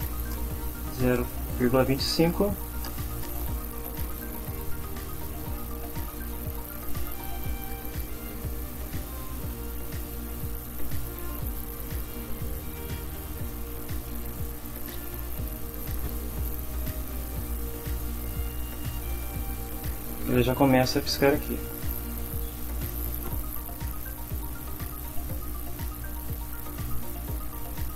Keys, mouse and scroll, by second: 0.3 Return, 2.6 shift+[, 2.8 shift+Return, 3.5 Up, 3.8 End, 4.4 Return, 4.9 Tab, 5.8-7.2 typing, 8.6-10.5 typing, 11.9-14.9 typing, 14.8 End, 17.0 Down, 24.2 Up, 25.2 space.